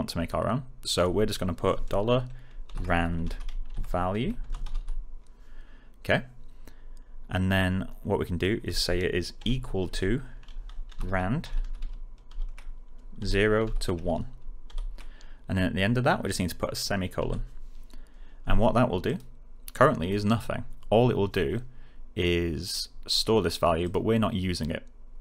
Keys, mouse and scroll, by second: 2.4-5.2 typing, 8.6-12.2 typing, 14.1-15.1 typing, 19.0 click, 22.6-23.2 click.